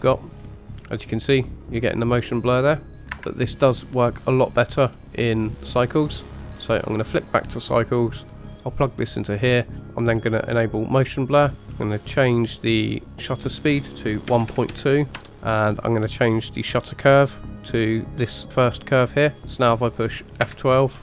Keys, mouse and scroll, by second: 4.8-5.4 scroll up 2, 5.4-6.9 drag, 8.2 click, 8.9 click, 10.2 click, 11.4 click, 13.1-15.3 drag, 16.6 click, 17.3-18.1 scroll down 2, 18.1 click, 19.4-20.5 scroll up 2.